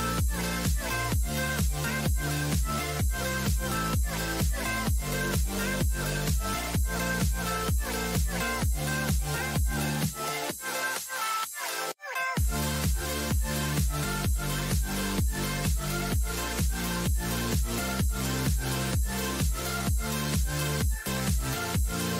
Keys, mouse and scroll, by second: 6.4 shift+a, 13.7 n, 14.6-22.1 middle drag.